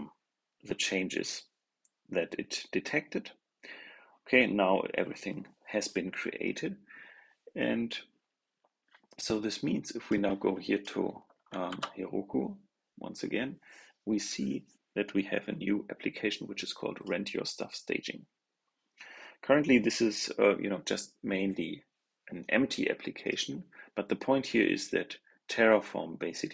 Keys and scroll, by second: 11.6 super+r.